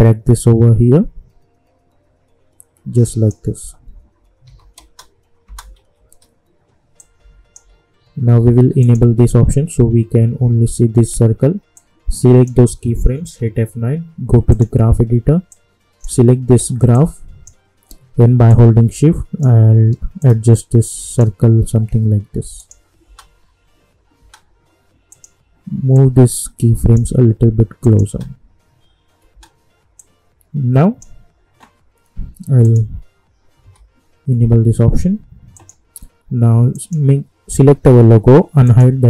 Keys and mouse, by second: 4.4 j, 4.7 space, 5.7 j, 7.0-8.8 drag, 11.7-13.1 drag, 13.1 F9, 14.5-22.5 drag, 23.0 space, 25.1-27.8 drag, 28.1 space, 30.0-32.6 drag, 33.6-34.8 typing, 35.5 click.